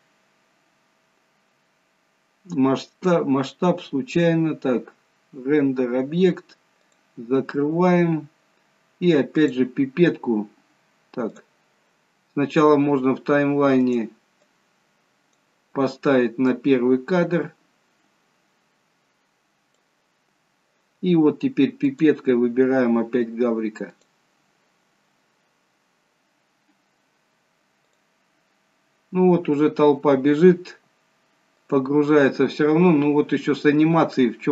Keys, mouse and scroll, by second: 0.4 scroll up 2, 7.0 click, 7.9-9.4 scroll down 2, 9.4 click, 9.4-9.8 scroll down 1, 13.8 click, 14.4 click, 16.7 click, 20.3 scroll down 2, 21.9 click, 25.2-25.6 scroll up 4, 26.4-28.0 scroll up 1, 28.0 click, 31.7 click, 33.2-33.6 scroll down 1, 34.0-34.5 scroll down 3.